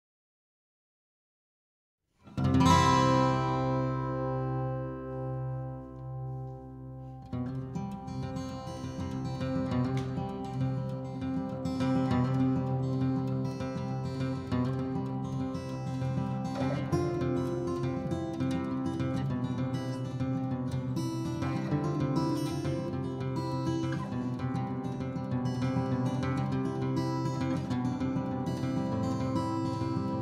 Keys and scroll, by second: 0.8 Escape, 2.6-3.3 typing, 4.4-6.3 typing, 9.8-14.7 typing, 15.4 ctrl+z, 19.5-20.3 typing, 22.5 l, 25.2-25.7 typing, 25.8 Return, 26.9 e, 28.7 l, 29.4 Escape.